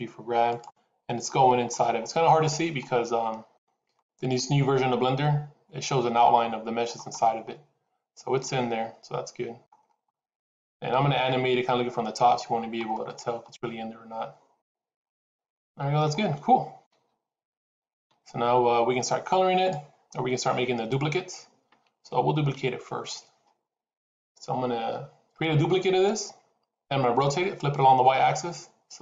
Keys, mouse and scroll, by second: 1.1 shift+middle click, 1.1 shift+scroll up 1, 1.8-2.2 scroll up 3, 2.3 shift+middle click, 7.0 scroll up 3, 8.3 middle click, 9.7 scroll down 4, 9.9 middle click, 11.3-12.0 scroll down 2, 12.8 middle click, 16.7 KP_7, 22.5 scroll down 1.